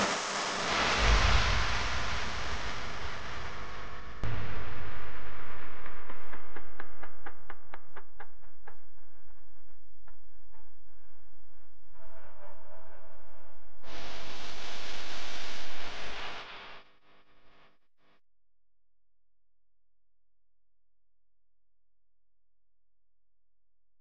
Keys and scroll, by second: 14.5 u.